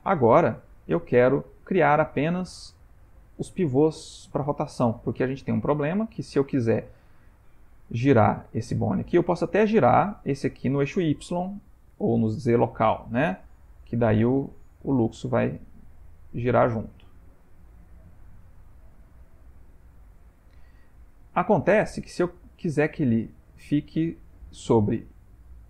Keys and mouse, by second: 0.2 ctrl+middle click, 0.9 shift+middle click, 1.9 middle click, 4.4 middle click, 6.3 click, 8.4 click, 9.0 middle click, 9.8 middle click, 11.9 r, 19.7 shift+middle click, 20.9 middle click, 21.6 middle click, 22.4 shift+middle click.